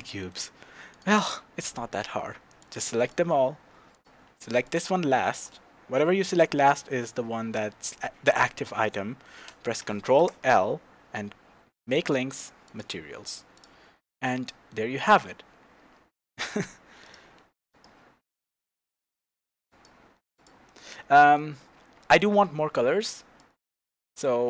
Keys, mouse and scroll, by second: 0.9 click, 2.6 click, 3.9 shift+click, 4.6 shift+click, 5.5-13.5 middle drag, 6.3-7.3 scroll up 2, 7.3 scroll up 1, 7.5-8.8 scroll down 2, 8.8 scroll down 1, 10.2 ctrl+l, 13.5 click, 13.9-14.4 scroll down 1, 14.4-17.0 middle drag, 14.9-15.6 scroll down 2, 15.6-16.5 scroll up 2, 16.5-17.0 scroll down 2, 17.0-20.1 drag, 20.3 click, 20.6-23.4 middle drag, 21.9 scroll up 2, 23.4-24.4 drag.